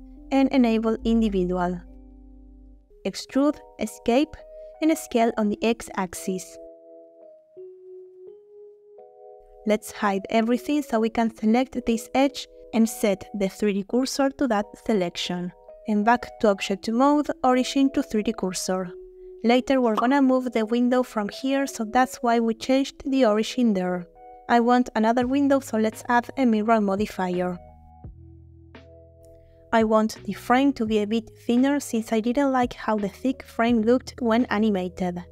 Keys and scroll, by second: 3.5 e, 4.4 Escape, 6.2 s, 6.3 x, 10.4 h, 12.0 2, 13.7 shift+s, 14.8 Tab, 26.7 0, 27.2 Return, 30.2 Tab, 33.5 3.